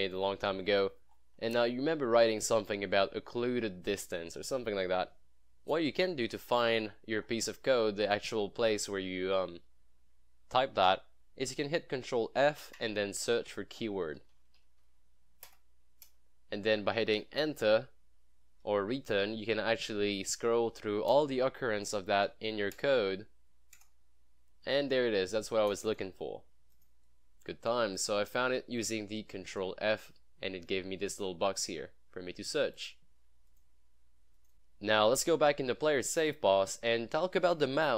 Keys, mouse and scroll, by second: 0.4 click, 0.5 scroll down 1, 1.0 scroll down 1, 1.2 scroll up 1, 6.4 scroll down 1, 6.6 scroll, 6.7 scroll down 1, 6.8 scroll, 6.8 scroll up 1, 6.9 scroll, 7.1 scroll down 1, 7.2 scroll, 7.3 scroll up 1, 8.1 click, 12.2 click, 12.5 ctrl+f, 13.8-15.2 typing, 15.5 Return, 21.2 Return, 25.8-27.8 drag, 32.8 click, 34.5-35.1 scroll up 1.